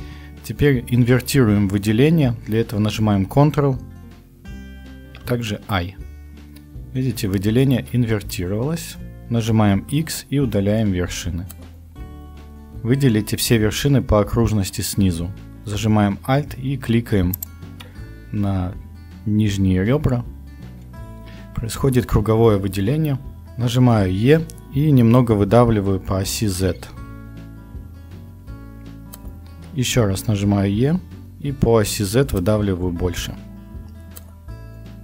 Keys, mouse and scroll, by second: 4.9 ctrl+i, 9.8 x, 23.4 KP_1, 24.3 e, 30.4 e.